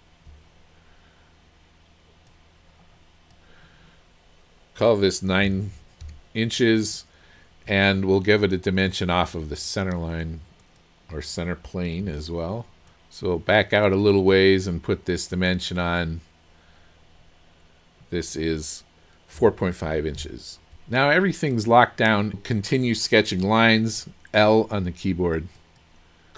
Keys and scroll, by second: 5.5 KP_9, 6.1 Return, 19.4 KP_4, 19.9 KP_Decimal, 20.2 KP_5, 23.9 l.